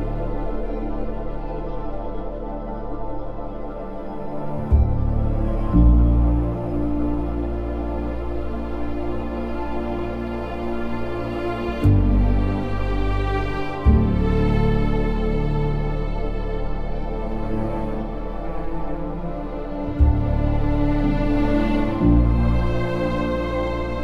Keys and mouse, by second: 0.5 g, 1.3 click, 2.3 g, 3.8 g, 4.9 click, 5.8 g, 6.3 click, 6.8 click, 7.1 g, 7.7 click, 9.5 g, 10.0 click, 13.2 alt+z, 13.7 Tab, 14.1 z, 15.2 middle click, 16.9 KP_3, 17.8 Tab, 19.1 alt+z, 19.4 2, 19.8 alt+click, 20.2 alt+z, 21.2 s, 22.6 click, 23.7 s.